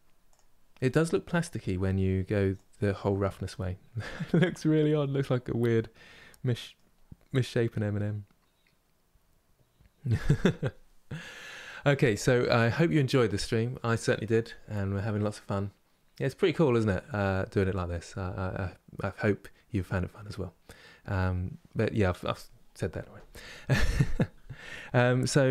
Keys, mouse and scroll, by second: 0.0-5.2 drag, 5.2-6.7 middle drag, 6.7-7.1 scroll down 1, 7.1-25.5 middle drag.